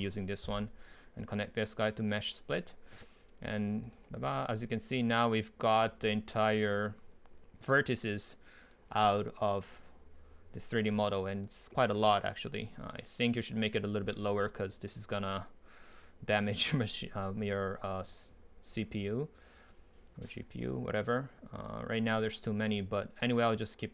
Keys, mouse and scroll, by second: 0.6 click, 3.0 click, 22.1-22.5 middle drag, 22.5-23.2 right drag, 23.2-23.9 drag.